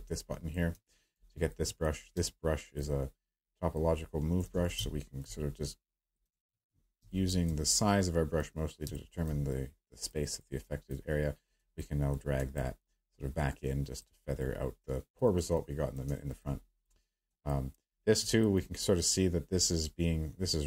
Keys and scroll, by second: 2.1-2.8 space, 4.5 ctrl+z, 4.7 space, 6.3 ctrl+z, 7.0 space, 8.8 space.